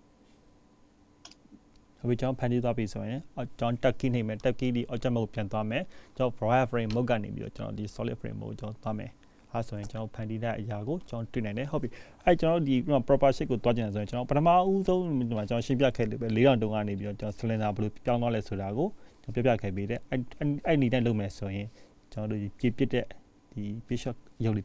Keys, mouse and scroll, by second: 0.3-1.6 scroll down 4, 1.6 click, 2.8-3.8 scroll up 2, 3.8-5.1 scroll up 5, 5.9-6.4 scroll down 4, 15.3-16.5 scroll down 3, 16.5-18.5 scroll up 2.